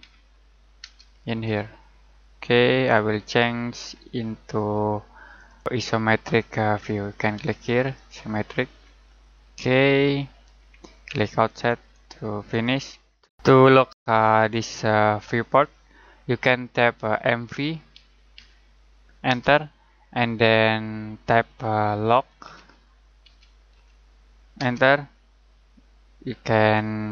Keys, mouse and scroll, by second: 0.0-0.8 typing, 1.4 click, 3.8 scroll down 1, 4.4 middle click, 5.0-5.3 scroll up 1, 5.3 click, 7.7 click, 8.8 scroll down 1, 9.0 middle click, 9.5 scroll up 1, 9.8 middle click, 17.3-19.3 typing, 22.1-22.4 typing, 23.7-24.5 typing.